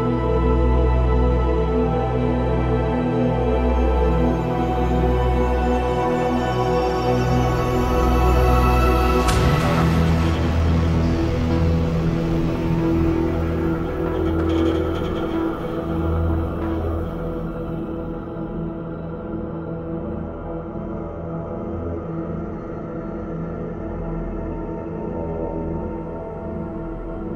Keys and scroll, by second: 15.6-16.6 typing, 21.0-21.8 typing, 22.5 ctrl+z, 24.3-26.7 typing.